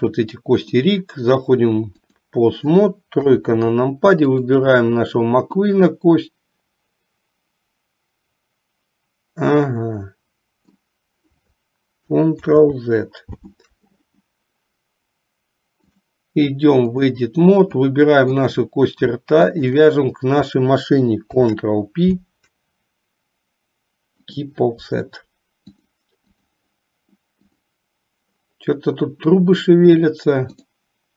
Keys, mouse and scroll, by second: 0.7-2.3 drag, 3.3 KP_3, 4.5 click, 5.8-11.0 drag, 12.6 ctrl+z, 15.9-17.3 drag, 17.9 click, 19.7 shift+click, 21.5 ctrl+p, 25.8 click, 27.5 click, 30.6-31.1 drag.